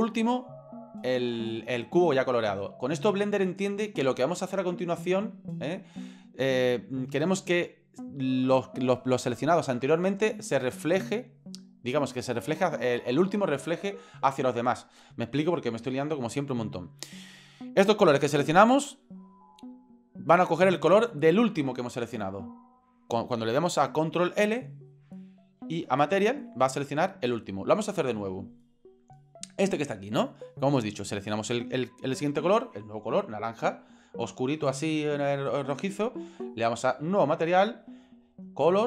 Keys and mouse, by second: 25.6 ctrl+l, 31.2 right click, 36.8 click, 37.4 click, 38.4 click.